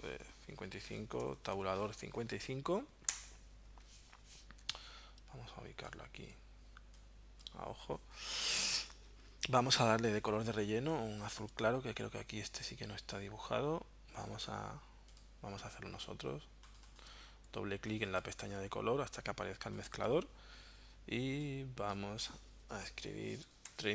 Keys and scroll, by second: 0.5 5, 1.1 Tab, 1.3 5, 3.1 Return, 4.2 v, 23.2-23.9 typing.